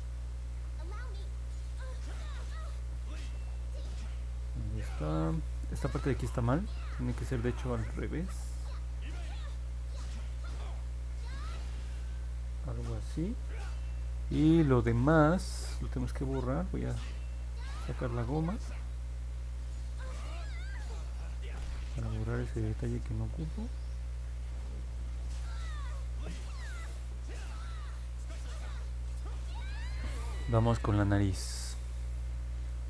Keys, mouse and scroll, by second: 1.8 click, 7.7 click, 8.4 ctrl+z, 9.6 click, 10.4 ctrl+z, 11.4 click, 16.7 2, 18.8-24.1 drag, 27.0-28.3 drag.